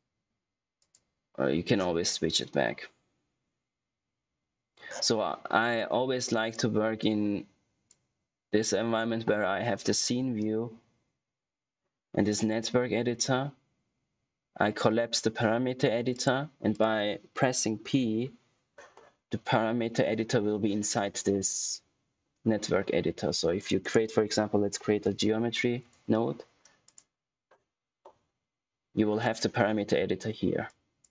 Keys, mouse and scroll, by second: 0.8 click, 6.6 click, 16.0 click, 17.8 p, 23.5 click, 23.8 right click, 24.7-25.6 typing, 25.7 Return, 26.8 click, 30.6 click.